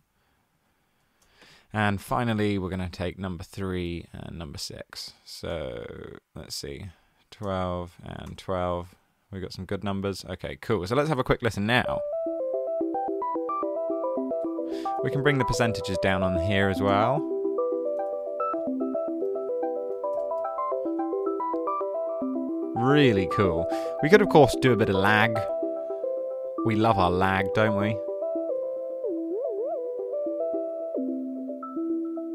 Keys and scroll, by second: 0.8-1.5 typing, 7.1-8.2 typing, 8.8 Return, 14.6-18.4 typing, 19.3 super+a, 20.1-20.8 typing.